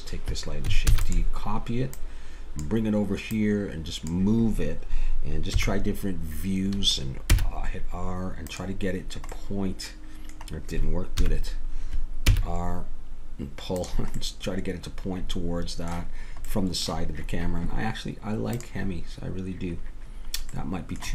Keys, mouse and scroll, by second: 0.9 shift+d, 2.6-5.2 drag, 5.5 KP_1, 7.3 r, 11.2 KP_3, 12.3 r.